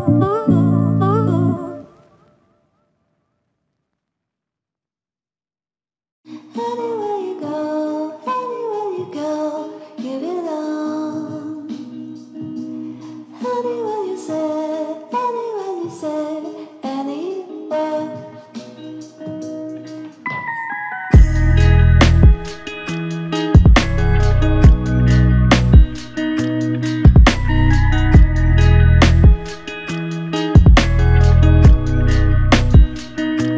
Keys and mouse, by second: 15.3 ctrl+alt+click, 24.3 typing, 24.5 ctrl+alt+click, 26.1 alt+click, 28.1 double click, 32.1 typing, 33.1 double click.